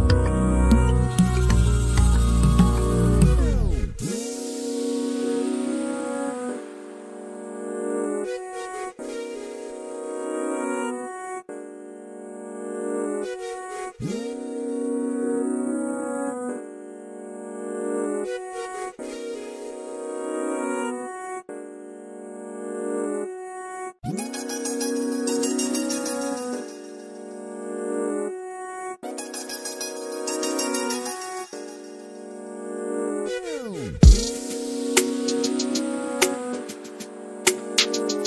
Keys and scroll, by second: 21.2-22.6 typing, 26.4 typing.